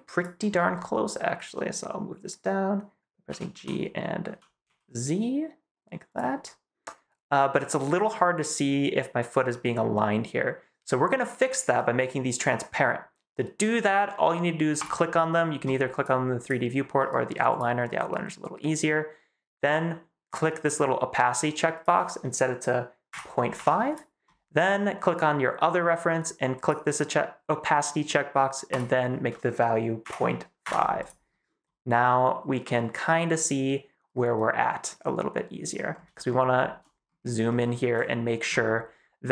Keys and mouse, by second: 3.2 g, 3.4 y, 4.2 x, 4.5 z, 6.0 click, 14.7 click, 15.8 click, 20.2 click, 21.6-23.8 drag, 25.0 click, 26.5 click, 28.6-30.9 drag, 36.1 shift+click, 37.4 shift+click.